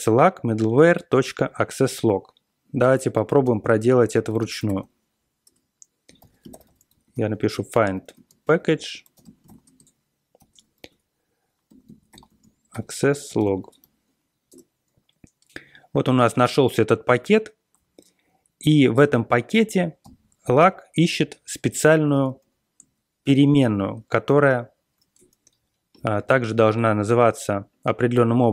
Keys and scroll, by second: 3.1 ctrl+x, 4.1 ctrl+x, 4.1-15.0 typing, 5.4 Return, 17.2 Up, 20.0 alt+., 22.1 ctrl+x, 23.2 ctrl+l, 23.6 ctrl+l.